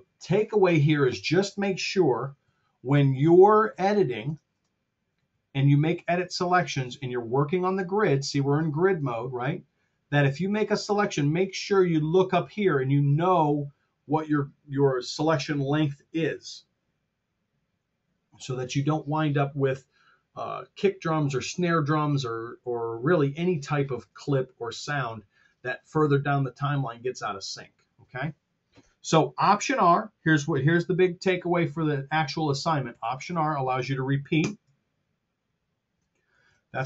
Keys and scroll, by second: 2.3 super+z, 4.4 Return, 5.1 super+z, 32.8 alt+r, 34.4 Return, 36.2 super+z.